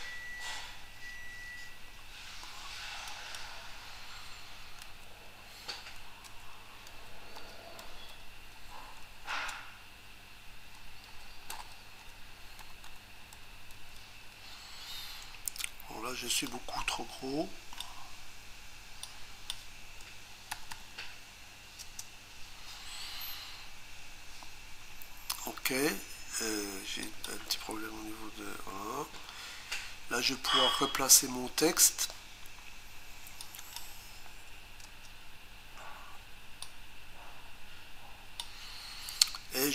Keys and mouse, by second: 3.1 click, 4.9 a, 6.3 BackSpace, 6.9 e, 8.1-8.6 typing, 10.8-13.7 typing, 16.5 click, 19.1 click, 20.5 typing, 21.9 Return, 27.1 click, 28.6 e, 33.5 click, 34.9 Return, 36.7 click.